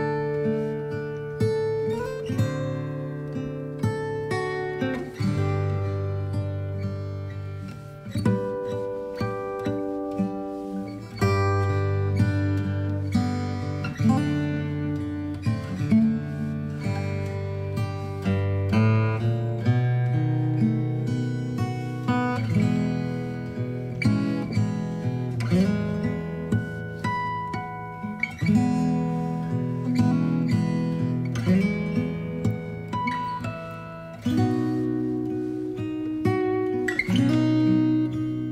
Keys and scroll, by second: 5.3-7.7 typing, 16.3 space, 22.9 ctrl+t.